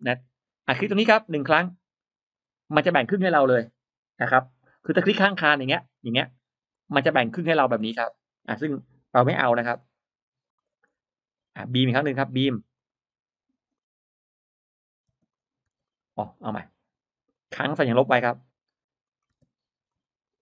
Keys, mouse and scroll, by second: 0.0 middle click, 0.0-0.8 scroll up 2, 2.2 click, 3.1 click, 5.2-5.5 scroll down 1, 5.6 middle click, 6.6-6.9 drag, 6.9-7.3 scroll up 2, 7.6 click, 8.3 middle click, 8.4-8.7 scroll down 1, 9.5 e, 9.7 click, 10.3 e, 10.5 middle click, 11.6 click, 12.6 click, 13.6 click, 14.9 space, 15.2 click, 15.6 space, 15.7 click, 16.2 click, 17.2 click, 18.0 click, 18.9-19.3 middle drag, 19.2 space, 19.7 click, 20.1-20.4 drag.